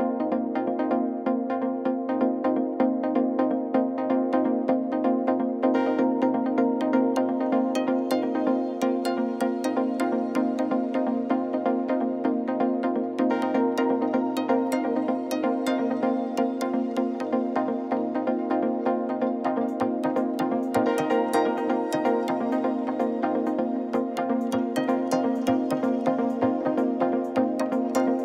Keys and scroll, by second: 0.0 Tab, 0.6 alt+a, 2.4-3.9 typing, 4.8 alt+a, 8.7 r, 8.8 z, 9.3 alt+a, 13.0 shift+z, 13.7 ., 15.4-17.6 typing, 18.7 g, 18.7 z, 20.9 shift+a, 21.6 ., 22.1 Tab, 23.1-24.7 typing, 23.6 Tab, 24.3 Tab, 25.9 s, 25.9 x, 26.5 s, 26.7 y, 28.0 g, 28.1 shift+z.